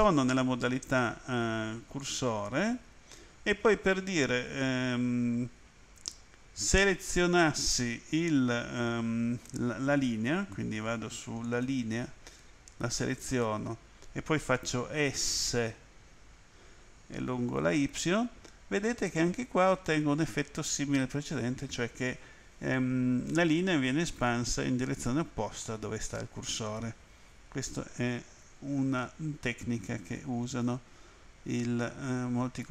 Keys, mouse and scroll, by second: 0.9 click, 2.0 click, 11.5 click, 13.2 right click, 15.6 s, 17.8 y.